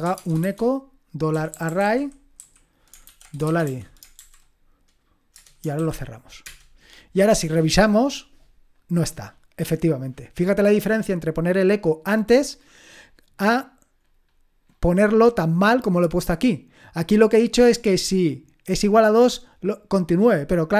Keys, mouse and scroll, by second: 0.0-6.4 typing, 9.4-10.5 drag, 11.6-13.0 drag, 13.0-16.4 scroll up 1, 16.4-18.3 drag.